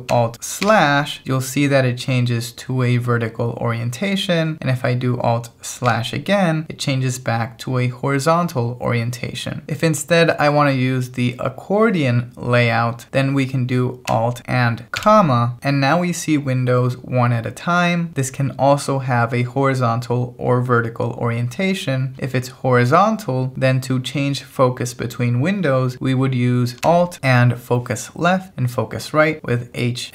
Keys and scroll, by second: 0.6 alt+/, 5.9 alt+/, 15.0 alt+,.